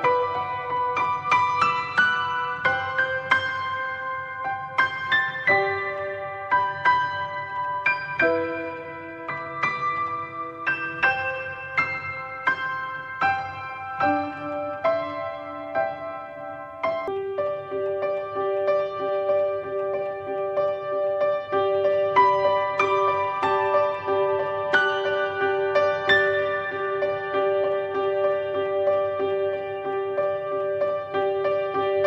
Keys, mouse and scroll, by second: 0.7 click, 1.8 click, 2.3 shift+d, 6.0-8.2 drag, 9.5-11.3 drag, 14.6-15.6 drag, 15.6-16.5 middle drag, 16.5 click, 22.4-26.5 drag, 26.5-26.9 scroll down 3, 26.9-27.9 middle drag, 27.9-28.6 scroll up 1, 30.5-32.0 drag.